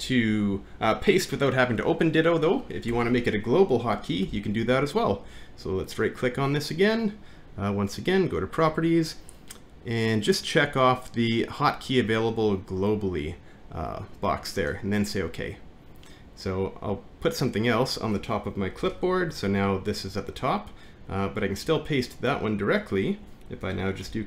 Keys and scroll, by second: 2.9 BackSpace, 4.3 alt+`, 18.9 alt+`.